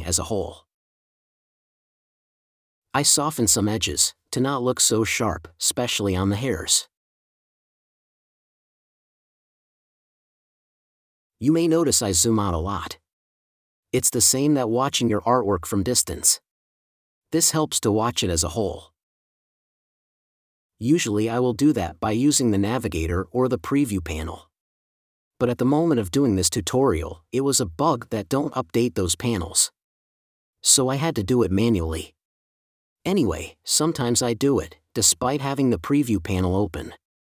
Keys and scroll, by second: 4.0 space, 7.6 space, 15.0 space, 17.1 5, 22.6 space, 28.2 space, 30.3 4, 31.7 space, 36.4 space.